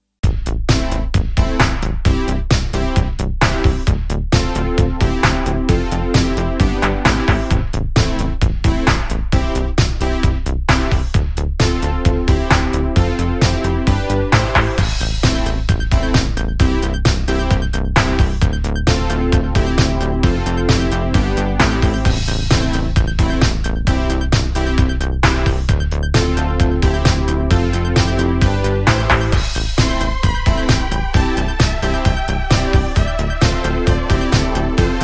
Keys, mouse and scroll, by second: 0.8-1.5 scroll down 1, 1.5-2.5 shift+middle drag, 2.5 click, 3.2 click, 7.4 shift+middle click, 7.8-8.3 scroll down 2, 8.3-8.9 scroll up 5, 8.9 shift+middle click, 9.6 click, 11.1 shift+d, 15.4 Tab, 16.1 Tab, 17.7 g, 18.6 Tab, 19.3 drag, 19.6 click, 20.4 Delete, 21.5 ctrl+z, 21.9 drag, 22.3 click, 23.1 drag, 23.5 click, 24.1 Tab, 25.5 x, 27.2 alt+click, 28.6 e, 31.2 scroll down 1, 31.4 shift+middle click, 31.9 click, 33.3-34.0 scroll up 1, 34.0 ctrl+r.